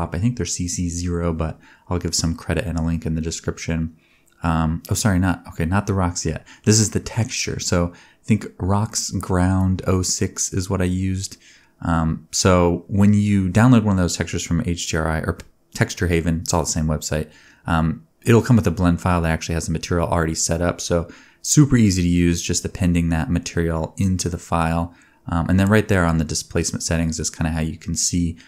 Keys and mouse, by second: 1.9 Tab, 2.2 a, 2.5 u, 3.8-5.2 drag, 5.7 a, 5.9 s, 8.9 middle click, 9.2 r, 11.0 Tab, 12.1-26.8 drag, 17.9 KP_0, 26.8 shift+middle click, 27.5-28.4 drag.